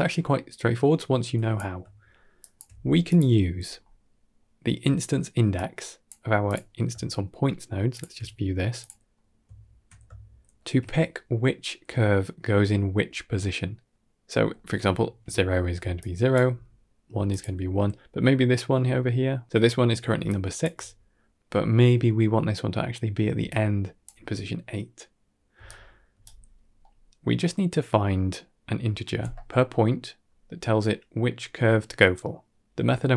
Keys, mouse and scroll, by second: 0.8-1.5 drag, 1.8 shift+middle click, 2.3 shift+click, 2.6 g, 3.2 middle click, 3.6 scroll up 3, 3.8-4.2 middle drag, 5.5-6.0 drag, 6.3 click, 7.8 ctrl+shift+click, 8.7 click, 9.0 middle drag, 9.4 ctrl+middle click, 10.0-10.5 shift+middle drag, 14.4 middle drag, 14.8 shift+middle click, 15.6 d, 15.8 click, 16.2 d, 16.4 d, 17.0 d, 17.2 click, 20.2 click, 20.2 d, 20.6 d, 23.3 d, 23.3 click, 23.9 d, 24.0 d, 25.4 d, 25.5 right click, 26.1 d, 26.7 middle click, 27.4 middle click, 31.7 middle click.